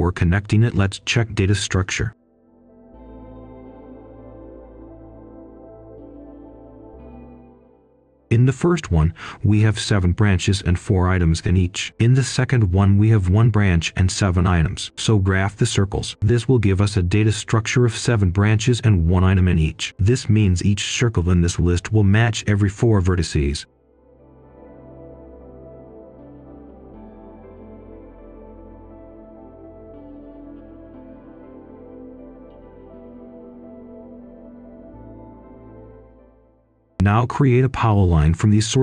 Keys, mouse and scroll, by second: 0.2-2.4 drag, 2.4 right click, 2.8 click, 3.3 ctrl+c, 3.5 ctrl+v, 3.7-6.4 drag, 8.2 ctrl+right click, 9.8-13.5 drag, 14.7 ctrl+shift+7, 15.6 right click, 18.3 click, 19.2 ctrl+shift+p, 20.4-25.0 drag, 25.0-27.5 drag, 27.5 click, 28.5 ctrl+shift+d, 29.2 ctrl+shift+h, 30.5 ctrl+right click, 31.5 click, 33.0 Delete, 33.7 click, 36.9-38.8 typing.